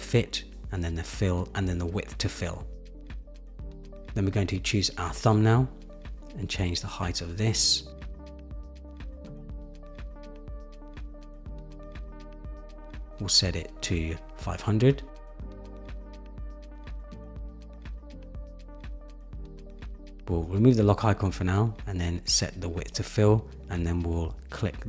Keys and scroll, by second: 1.4 Return, 5.0 super+-, 11.8 shift+Down, 12.5 shift+Down, 13.3 shift+Down, 15.5 shift+Up, 19.3 Return, 21.9 Right, 23.1 Return.